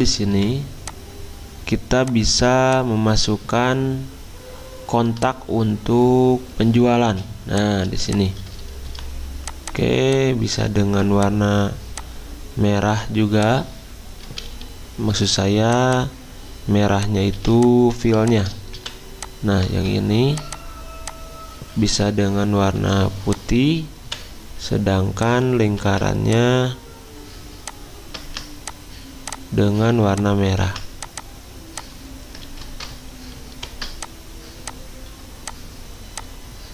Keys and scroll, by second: 7.0 z, 8.8 v, 14.6 x, 17.4 z, 18.7 v, 19.7 ctrl+z, 22.8 i, 24.0 v, 25.8 ctrl+z, 28.2 ctrl+z, 30.7 ctrl+z, 32.4 ctrl+z.